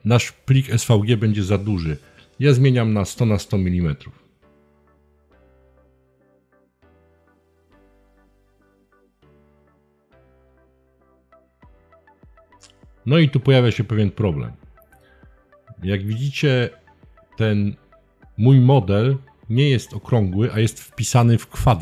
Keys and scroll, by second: 1.6-2.8 typing, 3.3 Tab, 6.3 Return.